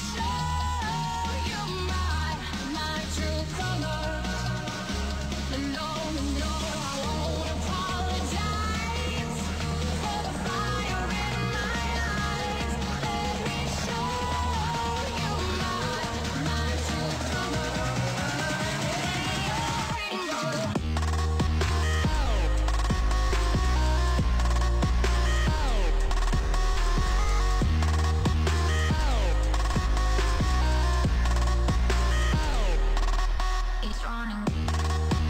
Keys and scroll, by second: 0.7 ctrl+s, 4.8 ctrl+s.